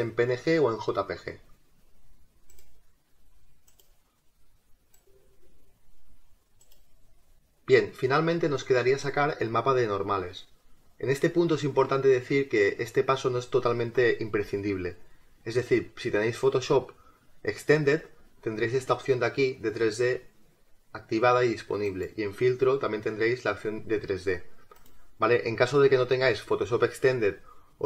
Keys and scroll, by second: 21.9 space.